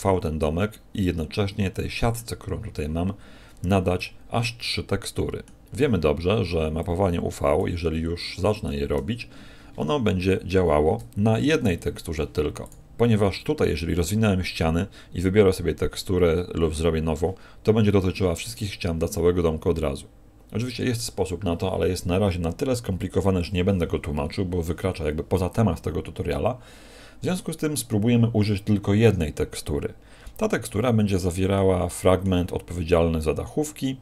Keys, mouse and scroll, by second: 3.9 middle click, 6.8 click.